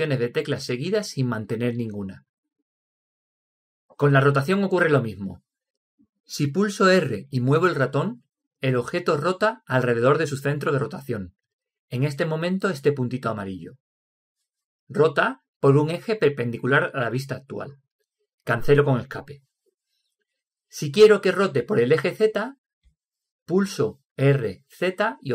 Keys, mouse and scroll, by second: 7.9 r, 24.6 r.